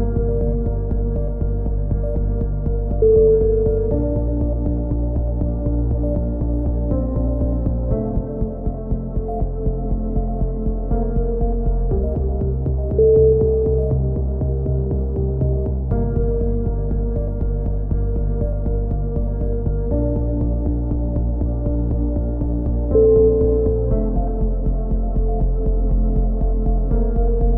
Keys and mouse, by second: 0.0-1.3 drag, 0.7 g, 1.5 a, 1.9 c, 2.9-3.9 drag, 4.2 a, 5.7 c, 6.3 right click, 7.1 click, 8.3 a, 8.4-10.0 middle drag, 11.3-12.4 middle drag, 12.2 c, 14.7-15.7 right drag, 15.4 e, 16.2-17.2 drag, 20.5-22.1 drag, 20.8 a, 21.5 c, 22.7-23.7 drag, 23.1 g.